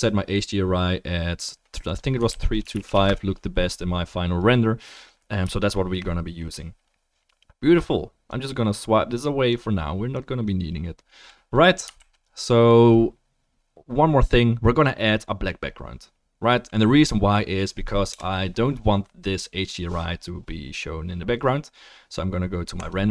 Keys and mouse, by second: 11.8-15.8 ctrl+drag, 12.0 ctrl+s, 18.1 KP_0, 22.8 middle click.